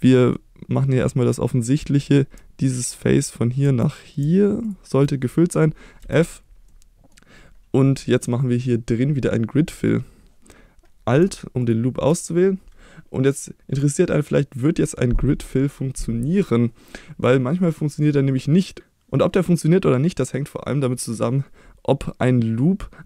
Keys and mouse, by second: 0.1 middle click, 1.0 middle click, 3.0 middle click, 5.4 middle click, 6.0 f, 6.7 middle click, 11.6 alt+click.